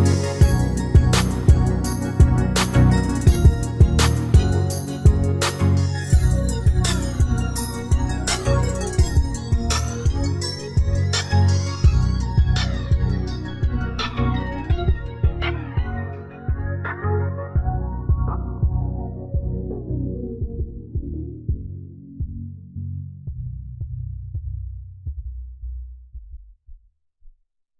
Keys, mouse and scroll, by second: 2.4-4.1 drag, 3.0-4.8 middle drag, 5.3-7.7 middle drag, 7.9 shift+s, 11.1 shift+s, 16.4 shift+a, 19.5-21.3 drag, 21.6 s, 25.0-27.7 middle drag, 26.3 s.